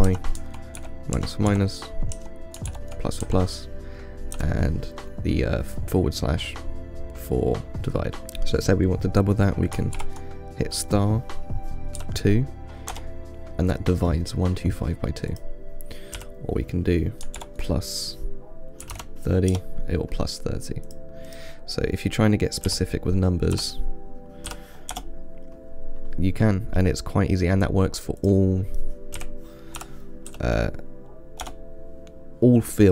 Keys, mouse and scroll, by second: 15.6-18.8 drag, 21.1-24.6 drag, 28.5-31.6 drag.